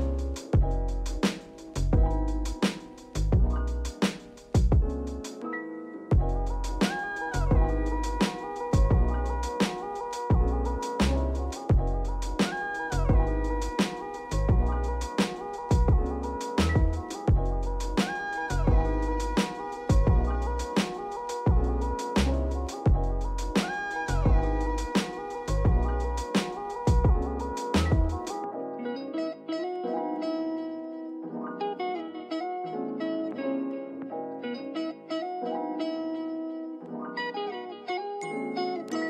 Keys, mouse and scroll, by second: 0.0 click, 1.7 click, 2.5-4.5 drag, 4.5-5.0 scroll down 2, 5.0-6.1 shift+middle drag, 6.1-6.6 scroll up 2, 6.9 click, 8.7-10.8 drag, 12.9-18.5 drag, 19.5 click, 19.9-23.0 drag, 25.1 click, 26.3-29.3 drag, 29.3-30.6 scroll down 2, 30.6-31.1 shift+middle drag, 31.1 click, 31.9-32.7 scroll up 1, 32.7 click, 33.4 click, 34.2 click, 35.5-37.9 drag, 38.7-39.0 drag.